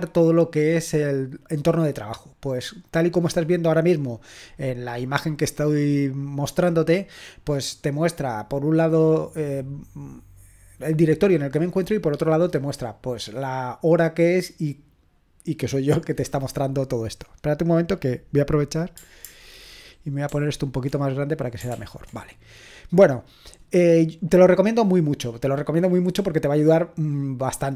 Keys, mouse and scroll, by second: 20.3 ctrl+alt++, 21.7 ctrl+l.